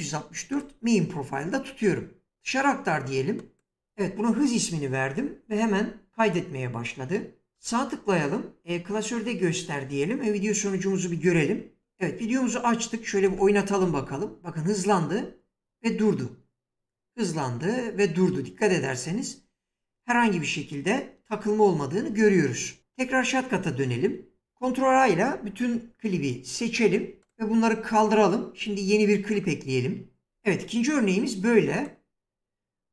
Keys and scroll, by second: 24.1 ctrl+a.